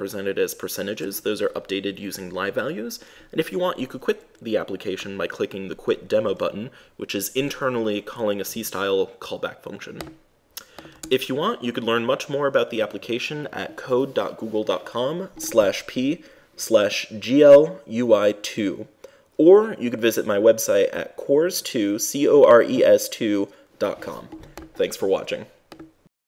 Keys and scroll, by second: 11.3 super+Tab.